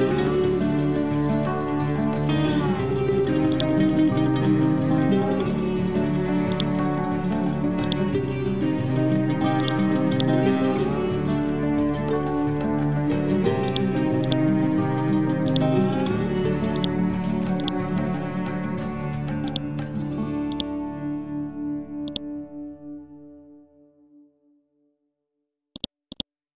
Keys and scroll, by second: 0.3 Down, 4.4 Down, 6.9 scroll down 1, 8.9 Down, 11.7 scroll up 2, 15.1 Delete, 16.4 ctrl+z, 18.9 ctrl+g.